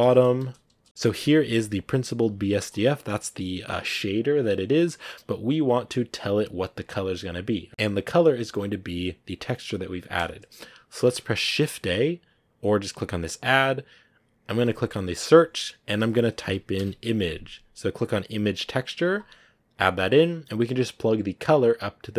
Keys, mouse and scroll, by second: 4.8-7.6 drag, 9.5 click.